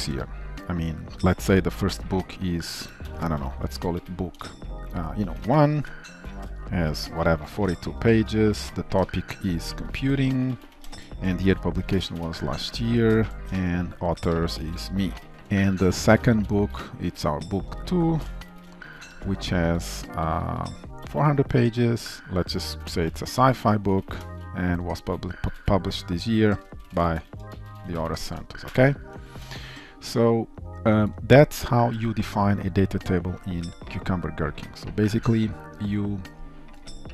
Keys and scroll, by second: 16.0 ctrl+d, 17.8 ctrl+shift+Right, 19.8 Delete, 22.2 ctrl+shift+Left, 25.5 Delete, 26.8 ctrl+shift+Left, 28.7 ctrl+alt+l, 29.8 ctrl+s.